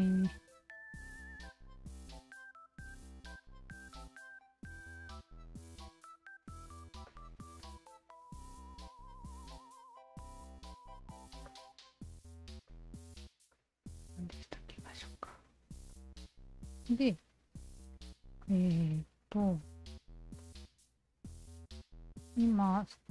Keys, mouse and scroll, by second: 1.3 w, 2.4 shift+click, 3.8 ctrl+z, 4.9 shift+click, 6.1 shift+z, 7.1 click, 7.6-8.7 drag, 9.4-10.4 shift+drag, 10.7 shift+z, 11.5 click, 11.7 Tab, 12.2 alt+right drag, 12.7 click, 13.2-13.5 alt+right drag, 13.6-15.7 alt+drag, 15.9-17.5 alt+drag, 18.4-19.8 alt+drag, 20.4-20.8 alt+drag, 21.3-21.9 alt+drag, 22.3 alt+drag.